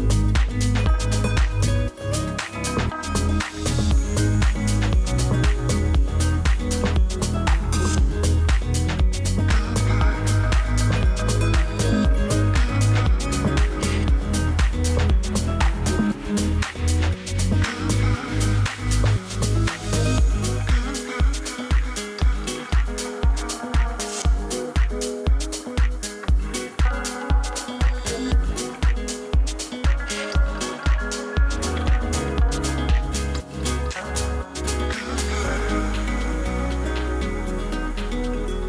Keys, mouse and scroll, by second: 0.0-1.8 typing, 2.6 click, 11.2 click, 18.5 click, 18.5-19.3 typing, 21.3 click, 21.3 typing, 30.6 click, 30.9 ctrl+space, 31.5-32.7 typing, 33.2 click, 37.4 scroll up 1.